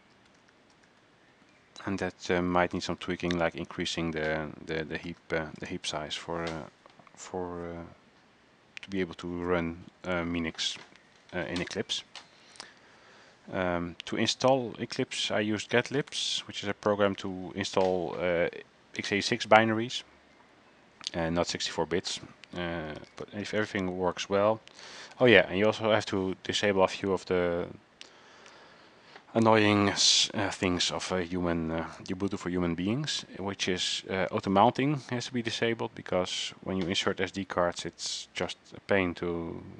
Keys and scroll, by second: 0.0-4.2 typing, 5.2-6.3 typing, 15.6-16.8 typing, 17.3 ctrl+c, 23.0-24.2 typing, 25.3 ctrl+c.